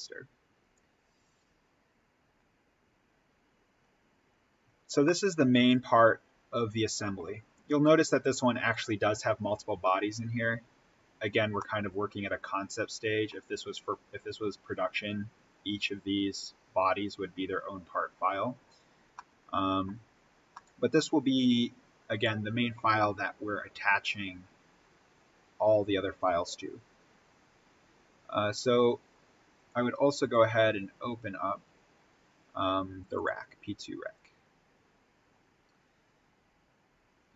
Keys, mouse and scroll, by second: 4.3-4.9 scroll down 1, 4.9-8.6 middle drag, 8.6 click, 11.5-14.8 middle drag, 14.8-16.7 scroll down 1, 19.0 scroll down 1, 19.1 middle click, 20.0-20.4 scroll up 1, 20.4-25.6 middle drag, 25.6-27.3 scroll down 1, 29.5 click, 33.1 click.